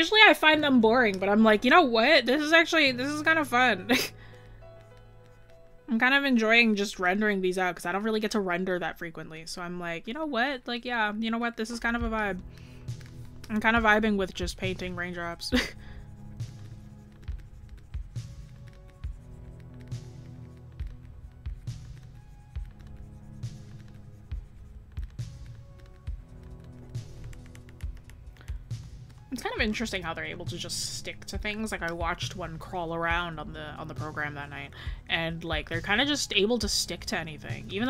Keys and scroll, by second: 1.6 scroll up 1, 11.8 scroll down 1, 13.8 scroll up 1, 27.3 scroll down 1, 29.7 scroll up 1, 31.7 scroll, 32.5 scroll up 1.